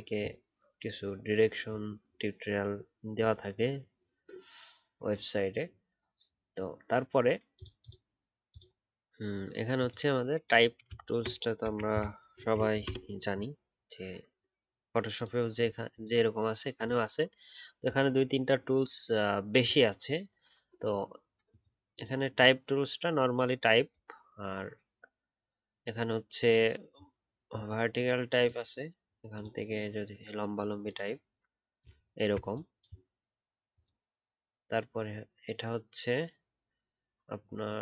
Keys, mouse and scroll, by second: 12.3 ctrl+alt+2.